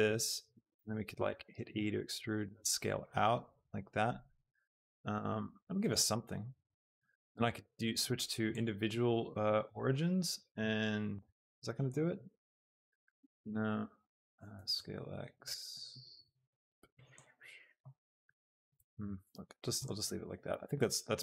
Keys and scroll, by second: 1.3 e, 1.7 Escape, 2.1 s, 10.5 s, 11.2 Escape, 14.5 s, 14.9 x, 19.2 ctrl+z, 20.4 Tab.